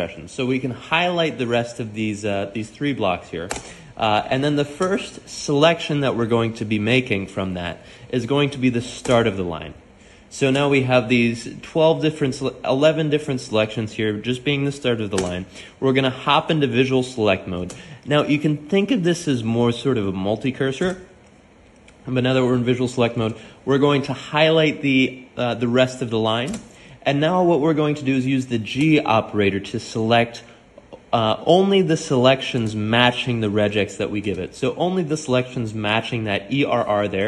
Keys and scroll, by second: 3.7-5.1 typing, 9.3-10.7 typing, 15.9-17.2 typing, 22.0-23.5 typing, 27.6-29.4 typing, 31.2-34.5 typing.